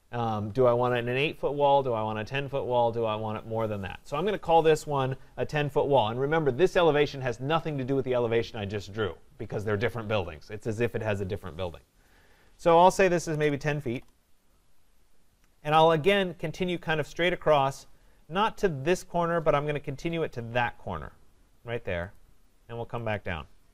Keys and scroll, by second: 13.9 Return.